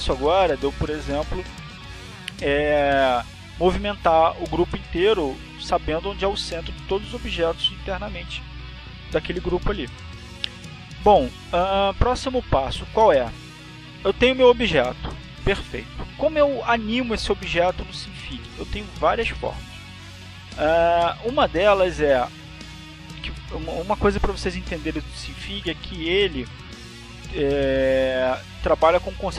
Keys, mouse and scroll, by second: 1.1 click, 2.2 click.